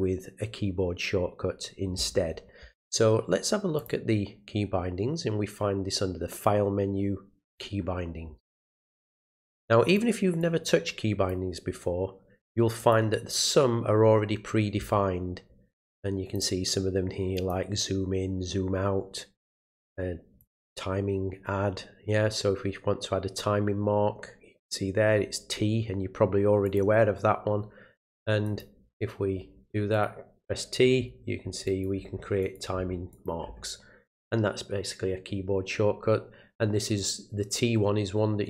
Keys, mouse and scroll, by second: 3.8 click, 7.5 click, 9.4 click, 10.4 click, 12.8 click, 16.3 click, 17.4 click, 20.4 click, 26.6 click, 28.4 click, 29.9 click, 31.7 click, 32.4 click, 33.1 click, 37.0-38.4 drag.